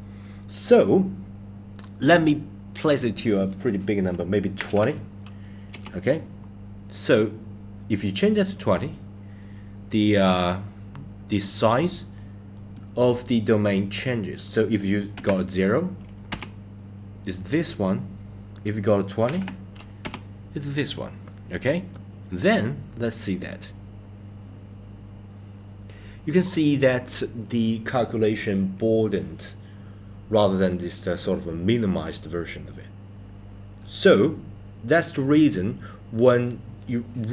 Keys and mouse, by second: 0.6-5.8 drag, 14.5-16.4 drag, 18.5-20.1 drag, 23.4 click.